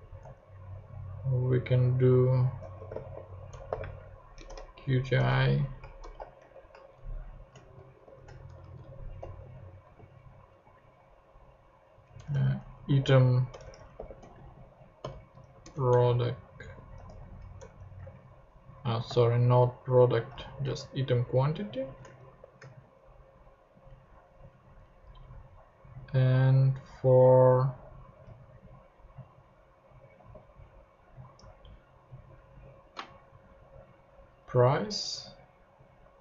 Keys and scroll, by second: 0.2 `, 2.4-6.4 typing, 7.0 shift+Left, 7.5 shift+Left, 8.0 shift+;, 8.4 shift+Right, 9.4 p, 9.8 r, 10.6 o, 12.2-15.9 typing, 15.6 Return, 16.9 q, 17.6 BackSpace, 18.0 ctrl+Tab, 20.3 super+c, 20.6 ctrl+super+Tab, 21.4 ctrl+Tab, 22.3 alt+shift+Right, 22.7 shift+super+v, 23.6 super+v, 23.9 Up, 24.5 Down, 24.8 Up, 28.2 super+c, 30.2 super+v.